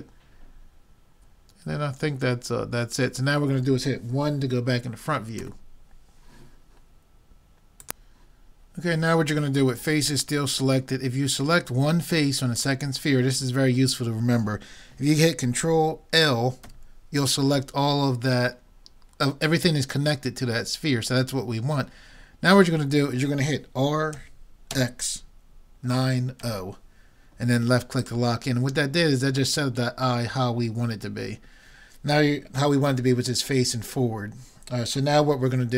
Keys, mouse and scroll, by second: 5.4 KP_1, 12.6-14.4 drag, 16.6 ctrl+l, 24.2 r.